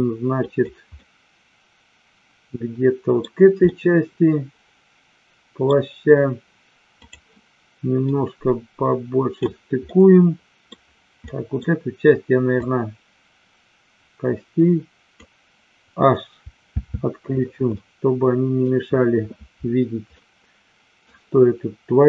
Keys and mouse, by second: 0.4 click, 1.0-3.2 middle drag, 3.6-5.6 middle drag, 7.0 click, 8.1-9.4 drag, 9.7 middle click, 11.2 middle click, 12.5-15.2 drag, 16.6 h, 17.6-18.6 middle drag, 20.2 middle click.